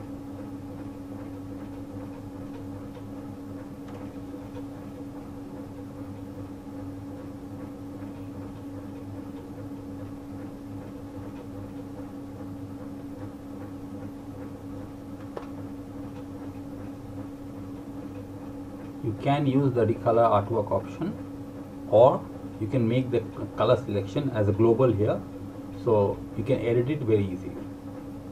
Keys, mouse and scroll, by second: 10.1 click, 16.8 click, 28.1 click.